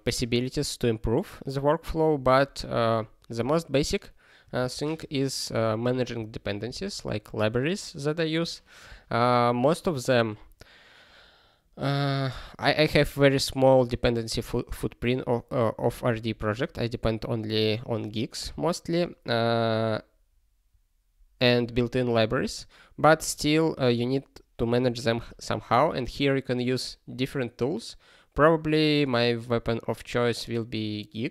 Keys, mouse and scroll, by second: 4.6 ctrl+n, 4.9 ctrl+space, 5.5 ctrl+n, 6.1 ctrl+g.